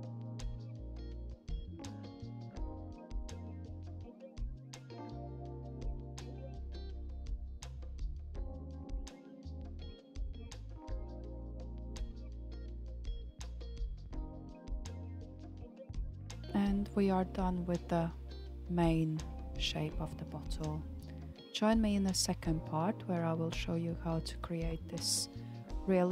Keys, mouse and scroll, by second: 0.5 KP_1, 1.4-4.5 scroll up 2, 4.9-6.6 drag, 6.6 g, 11.7 alt+z, 12.5-12.9 scroll down 4, 12.9-15.9 middle drag, 16.3 alt+z, 16.9 alt+z, 17.5 click, 17.8-18.3 scroll down 5, 18.3 shift+middle click, 19.2-19.9 scroll up 4, 19.9-20.6 scroll down 1, 20.6 KP_1, 21.6 Tab, 22.1-22.6 scroll down 1, 22.6-26.1 shift+middle drag.